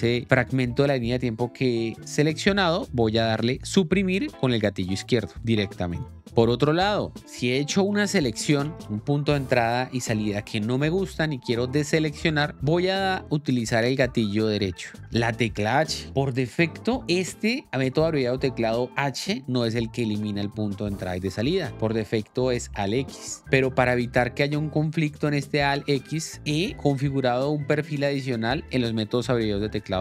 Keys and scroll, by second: 5.3 Delete, 8.4 Right, 15.0 h.